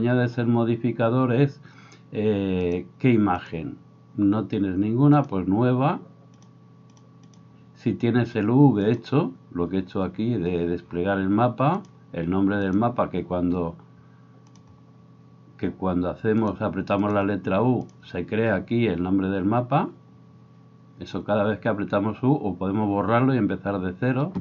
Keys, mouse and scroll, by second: 3.6-5.3 middle drag, 5.3-7.0 right drag, 7.0 middle click, 7.3-14.6 right drag, 14.6-16.4 middle drag, 16.4-24.4 drag.